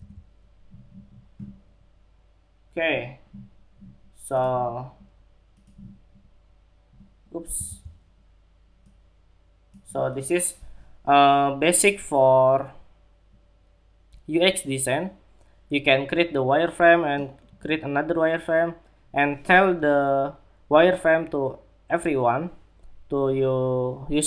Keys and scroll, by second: 7.0 super+z.